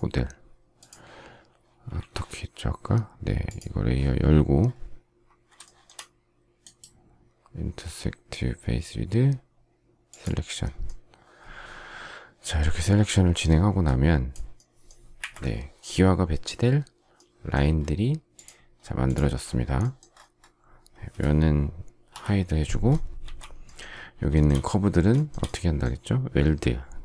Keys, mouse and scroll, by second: 1.9 ctrl+a, 5.5 shift+middle click, 15.1 Delete, 22.0 h, 23.1 ctrl+a, 24.2 shift+scroll, 24.2 shift+middle click, 25.2 shift+middle click.